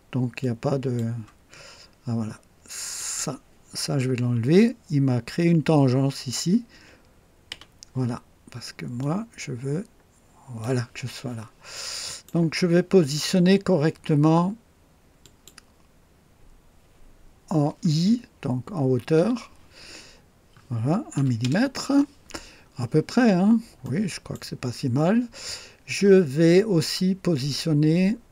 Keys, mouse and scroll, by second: 0.4-1.1 drag, 1.6 scroll up 2, 3.0 click, 7.5 Delete, 9.0-10.8 drag, 11.0-11.4 scroll down 1, 11.7-12.4 right drag, 15.2 click, 19.1 i, 21.1 KP_1, 21.4 KP_Enter, 23.3 scroll down 2, 23.8-24.5 right drag.